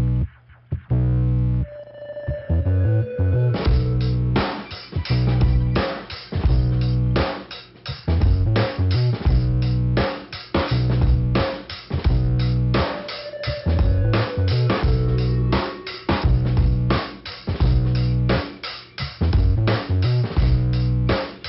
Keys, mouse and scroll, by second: 1.1 click, 2.1 click, 2.8 click, 4.0 middle click, 5.4 click, 7.2 click, 8.2 click, 8.3 click, 9.3 click, 10.5 click, 12.2 click, 13.1 click, 14.2 click, 15.8 click, 17.0 scroll down 1, 17.7 click, 19.2 scroll up 2, 20.0 click, 20.7 middle click.